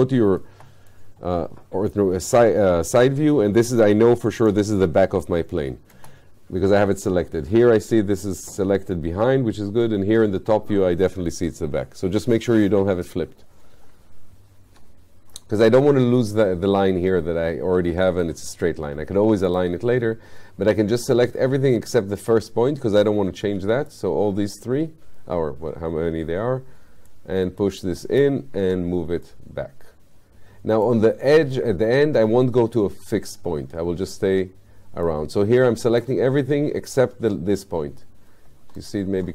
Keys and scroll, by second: 6.0 space, 14.7 ctrl+z, 28.7 w.